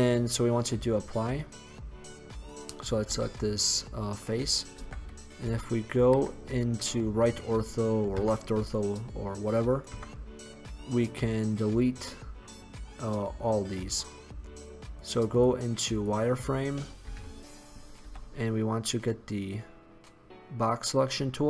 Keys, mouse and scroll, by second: 1.8 click, 2.4 right click, 3.1 x, 4.8 KP_1, 5.5 KP_3, 6.2 KP_5, 8.2 Tab, 10.1 Tab, 15.1 click, 15.9 click, 17.1 click, 17.4 a, 18.2 b.